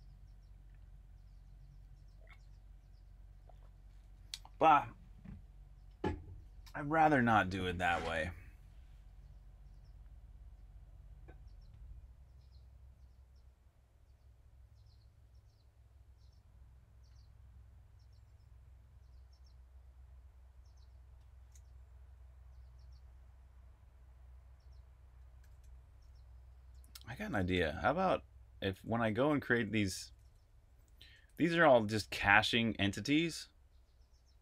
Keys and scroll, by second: 25.1-26.0 typing, 27.4 super+j, 28.7 super+j, 29.6 super+j, 30.1 super+k, 31.0 super+k.